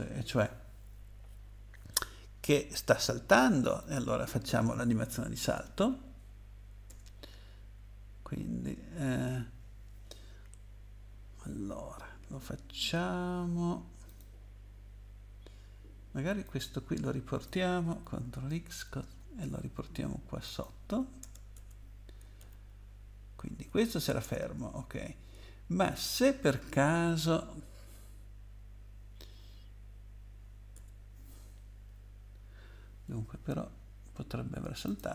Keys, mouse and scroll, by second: 3.8 click, 6.9 Return, 14.1 click, 16.4 click, 18.5 ctrl+x, 20.5 click, 21.2 Return, 21.5 BackSpace, 22.4 ctrl+v, 24.2 Return, 30.7 BackSpace, 34.9 click.